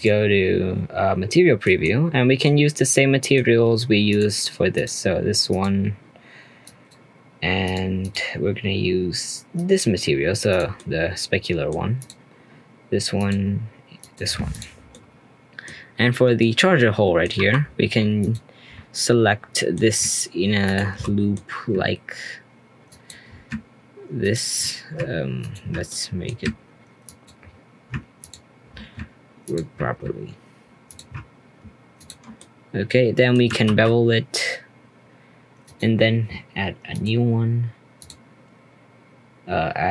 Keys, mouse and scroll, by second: 0.0 click, 1.2-1.6 scroll up 2, 1.6 middle click, 2.1 scroll up 2, 2.4-3.4 middle drag, 3.4-4.1 scroll up 3, 4.1 click, 4.7 click, 5.5 click, 6.6 click, 7.6 click, 8.1-10.6 drag, 10.7-12.0 middle drag, 12.0 click, 13.1-14.6 drag, 14.7 scroll down 1, 14.9-15.7 middle drag, 15.7-16.0 scroll up 2, 16.0 Tab, 16.4 middle click, 17.3 2, 18.2 alt+click, 19.5-20.6 middle drag, 20.6 alt+shift+click, 21.0-22.9 middle drag, 22.9 alt+shift+click, 24.2 alt+shift+click, 25.4 alt+shift+click, 25.9-27.0 middle drag, 27.0 alt+shift+click, 28.2 alt+shift+click, 29.4 alt+shift+click, 30.8 alt+shift+click, 31.9 shift+click, 32.3-33.6 middle drag, 33.6 ctrl+b, 36.9-39.9 drag.